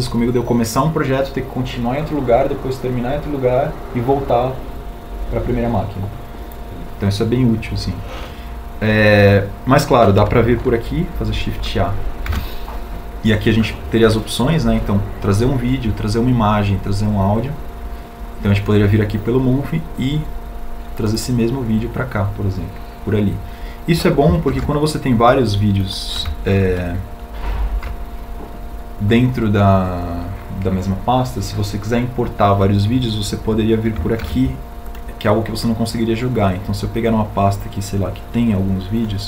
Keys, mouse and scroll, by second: 13.1 shift+a, 25.1 shift+d, 27.5 alt+e, 29.1 Home, 34.9 shift+a.